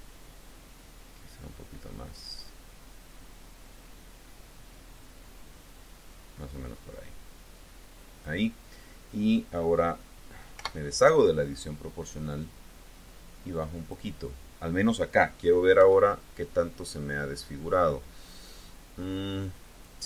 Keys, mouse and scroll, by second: 0.5-1.2 scroll up 4, 1.4 scroll down 2, 3.0 scroll down 2, 4.1 scroll up 2, 5.6 scroll down 2, 10.4 o, 12.2-14.0 drag, 15.6 KP_1, 18.5-19.9 drag.